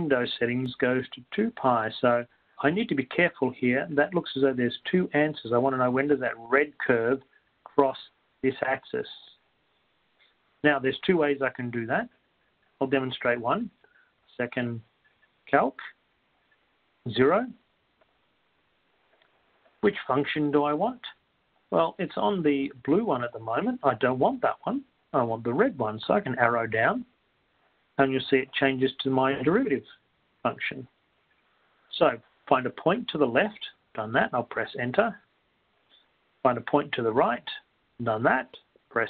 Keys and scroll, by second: 8.3-9.8 typing, 18.2 Down, 18.2 2, 20.9 Left, 26.4 Down, 30.1 Left.